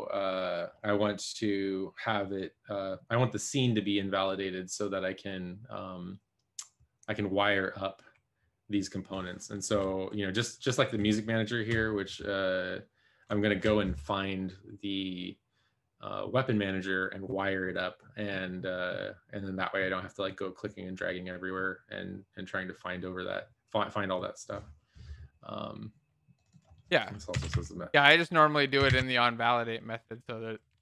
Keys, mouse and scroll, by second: 27.2-30.8 typing.